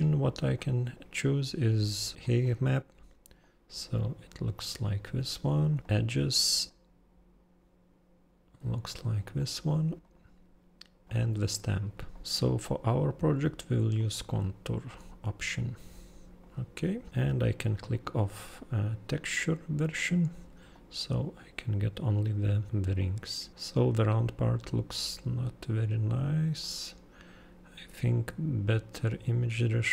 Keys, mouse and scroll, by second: 0.6 super+click, 3.4 super+click, 5.8 super+click, 6.0 super+click, 6.7 super+click, 10.0 super+click, 11.0 super+click, 12.1 super+click, 12.2 super+click, 14.0 super+click, 14.9 super+click, 17.1 super+click, 20.8 super+click, 23.5 super+scroll down 2, 26.6 super+click, 27.4 super+scroll.